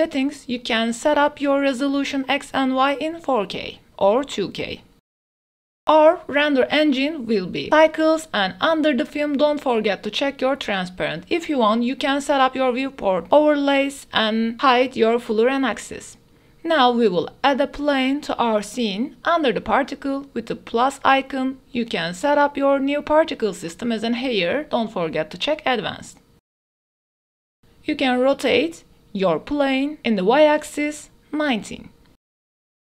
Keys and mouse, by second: 1.6 ctrl+z, 1.8 click, 3.5-4.5 ctrl+right drag, 4.5 click, 4.6 ctrl+right click, 9.7 right click, 11.4 click, 12.1 shift+a, 12.7-15.8 drag, 16.4 shift+a, 17.7 g, 17.9 z, 20.1 click, 20.5 click, 21.6-23.8 middle drag, 24.7 g, 25.1 z, 26.6 middle drag, 27.3-28.0 middle drag, 28.2-30.0 typing, 30.5 KP_Enter.